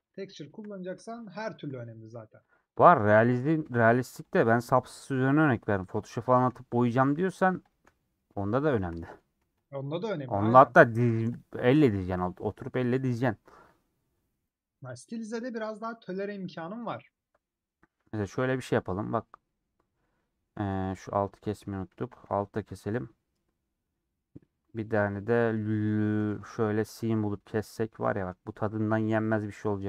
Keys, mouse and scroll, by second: 0.7 middle click, 1.5 shift+click, 1.6 middle click, 2.5 shift+click, 2.9 middle click, 3.9 shift+click, 4.3 shift+click, 5.1 middle click, 6.1 shift+click, 6.3 shift+click, 6.5 middle click, 7.4 shift+click, 7.7 shift+click, 7.9 middle click, 8.8 shift+click, 9.0 middle click, 9.6 shift+click, 10.0 shift+click, 10.6 middle click, 11.4 shift+click, 11.7 shift+click, 12.1-14.0 middle drag, 14.0 ;, 14.7-17.1 middle drag, 17.1 scroll up 2, 17.8 scroll down 1, 18.2 a, 20.0 middle click, 22.1 a, 23.3-26.4 middle drag, 26.4 typing, 27.7 click, 28.0-29.0 middle drag, 29.0 click, 29.5-29.8 middle drag.